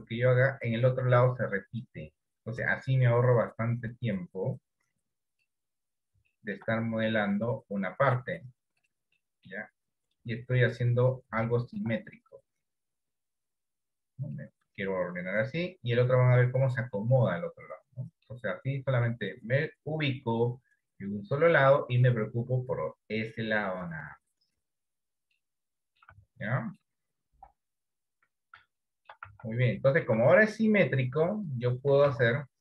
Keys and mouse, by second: 2.8 KP_1, 4.5 click, 6.4 shift+middle click, 7.2-8.4 middle drag, 9.4 middle click, 10.4 click, 11.6 shift+middle click, 13.3-14.4 drag, 15.2 click, 17.1-18.4 middle drag, 18.6 middle click, 19.8-22.0 middle drag, 25.5 middle click, 26.3 Tab, 26.6 middle click, 27.5 KP_1, 28.0 KP_3, 28.9 shift+middle click, 29.7 Tab, 30.0 shift+middle click.